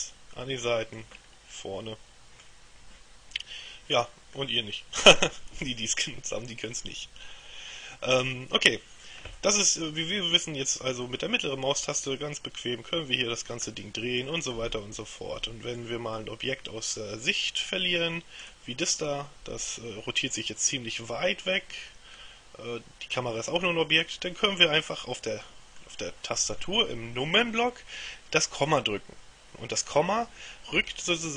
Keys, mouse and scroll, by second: 0.1-1.5 middle drag, 1.6-3.1 middle drag, 4.5-5.8 middle drag, 11.2-14.8 middle drag, 16.3 middle click, 18.6 right click, 19.1-22.1 middle drag, 22.3-26.4 middle drag.